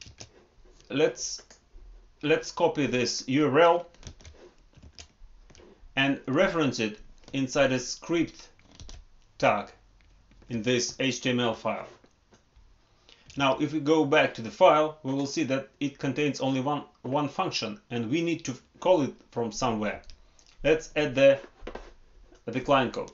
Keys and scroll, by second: 4.0 ctrl+c, 4.8 alt+Tab, 8.7 ctrl+v, 10.3 ctrl+s, 13.2 alt+Tab, 19.8 alt+Tab.